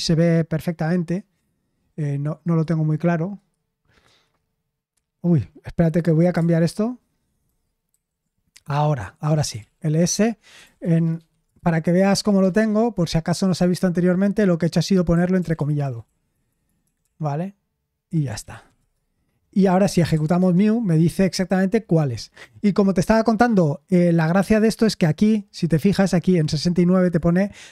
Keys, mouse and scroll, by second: 7.4 super+h, 7.9 super+h, 9.2-16.5 typing, 18.1-20.6 typing.